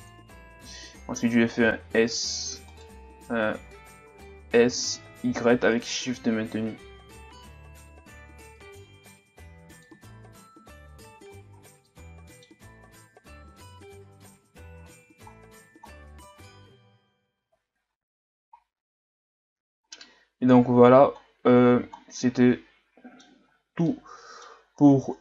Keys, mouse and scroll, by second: 0.3-1.8 scroll down 1, 1.8 scroll down 1, 2.0 d, 2.7 right click, 3.8 a, 4.1 a, 4.7 s, 9.0-10.5 middle drag, 10.5 Tab, 10.9 a, 11.3 a, 11.5-11.9 scroll down 1, 11.9-13.4 middle drag, 13.4 KP_2, 14.8-15.3 scroll up 5, 15.3-16.3 scroll down 4, 16.3-17.3 scroll up 3, 17.3-18.6 scroll up 4, 18.6-19.8 scroll down 3, 19.8-20.6 scroll up 6, 20.6-21.2 scroll up 3, 21.2-22.4 scroll down 7, 22.4-23.4 middle drag, 23.4-23.9 scroll up 5, 23.9-24.8 middle drag, 24.8-25.2 scroll down 9.